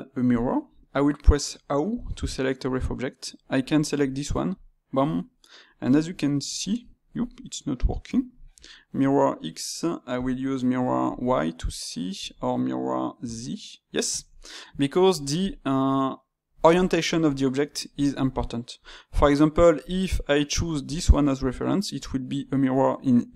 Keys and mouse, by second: 4.5-5.1 drag, 5.1-15.1 middle drag, 17.2 click, 18.2-20.8 shift+middle drag, 20.8 click, 23.2 click.